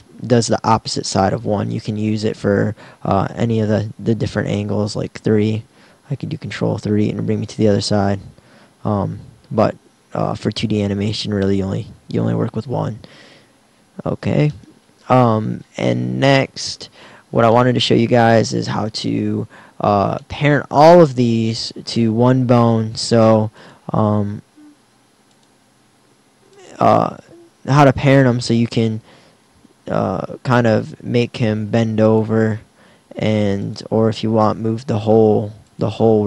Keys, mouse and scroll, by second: 1.5 KP_1, 3.6 KP_3, 6.5 ctrl+KP_3, 8.4 KP_1, 12.0 KP_1, 18.9 KP_1, 24.4 r, 25.9 r, 31.0 r, 32.2-34.4 drag, 35.1 r.